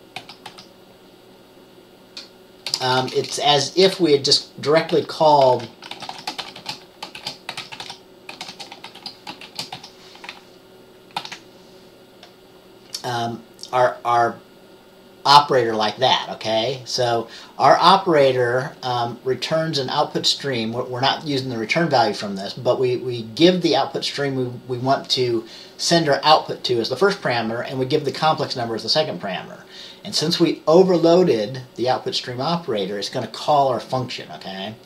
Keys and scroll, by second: 7.6-9.9 typing, 11.3 ctrl+s.